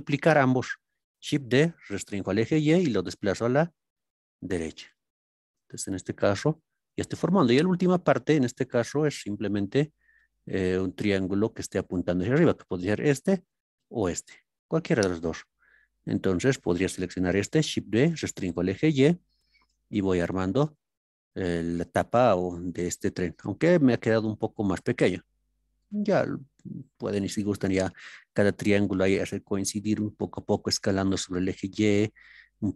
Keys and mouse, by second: 1.2 shift+d, 2.0 y, 6.5-11.2 drag, 13.3 click, 13.9 click, 16.5 click, 17.7 shift+d, 18.5 y, 20.7 click.